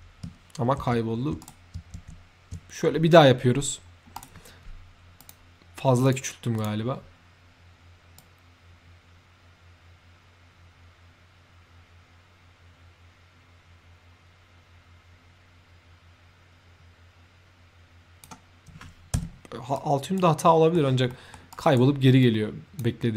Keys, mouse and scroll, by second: 0.7 ctrl+z, 1.3 right click, 1.4 z, 4.1 right click, 4.1 z, 5.1 click, 6.0 click, 6.5 click, 8.1-18.1 drag, 19.1 Escape, 19.6 right click, 20.3 middle click, 21.0 middle click, 21.4 right drag, 22.1-22.6 drag.